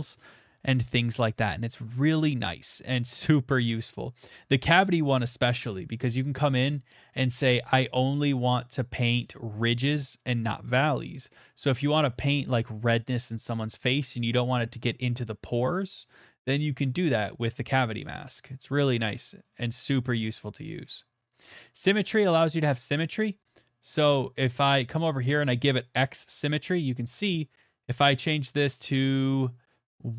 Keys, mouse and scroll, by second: 0.6 middle click, 19.5 click, 20.4 click, 20.9 middle click, 21.0 middle click, 21.4 click, 22.1 middle click, 23.2 click, 24.0 click, 24.7 middle click, 26.0-27.1 [, 27.1 middle click.